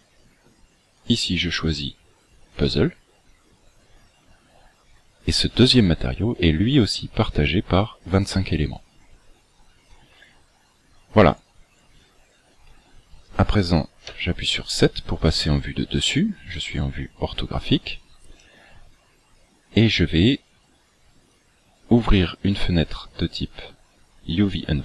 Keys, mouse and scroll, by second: 0.9 click, 10.2-11.0 scroll down 8, 11.3-12.5 scroll up 12, 14.0 KP_7, 17.9-18.6 scroll down 8, 21.3 click, 24.5 click.